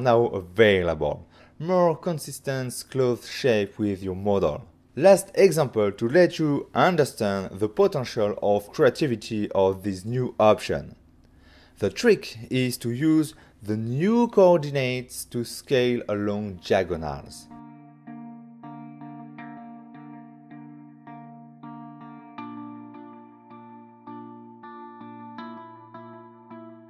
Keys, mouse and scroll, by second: 1.6 click, 2.4 g, 3.2 shift+click, 3.6 middle click, 3.9 alt+a, 4.0 middle click, 7.9 ctrl+middle click, 8.5 middle click, 9.9 click, 10.1 shift+middle click, 10.9 middle click, 11.4 ctrl+middle click, 12.3 f, 13.2 click, 13.5 click, 14.1 Return, 14.7 middle click, 15.5 g, 15.6 z, 16.4 click, 17.7 7, 18.8 6, 19.2 6, 19.7 6, 20.6 shift+middle click, 21.3 scroll up 1, 21.7 scroll down 1, 22.6 click, 24.0 click, 25.3 s, 25.6 x.